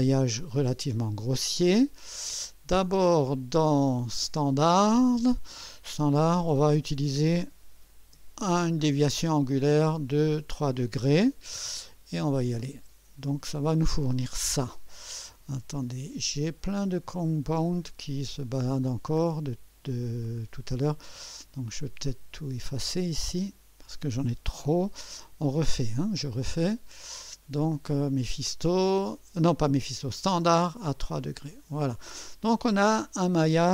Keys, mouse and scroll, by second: 2.0 click, 6.7 click, 12.6 click, 21.6 click, 23.4 shift+click, 24.7 Delete, 25.8 click, 26.9 click, 31.2 click, 33.0 click.